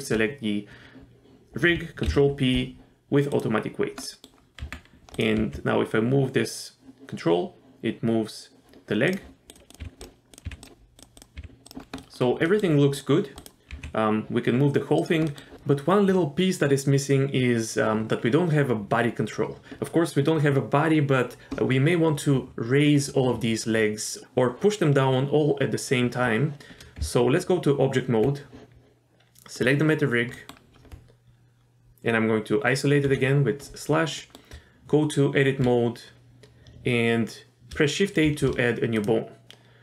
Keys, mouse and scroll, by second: 2.1 ctrl+p, 4.1 middle click, 4.6 Tab, 5.2 click, 5.3 g, 9.5 click, 9.7 click, 9.8 g, 10.3 click, 10.4 g, 11.0 click, 11.1 click, 11.4 g, 11.8 scroll down 2, 12.0 middle click, 12.5 middle click, 13.0 click, 13.4 click, 13.7 g, 15.3 middle click, 27.0 Tab, 29.5 click, 30.3 middle click, 33.0 KP_Divide, 34.2 middle click, 34.5 Tab, 38.3 shift+a, 39.0 click.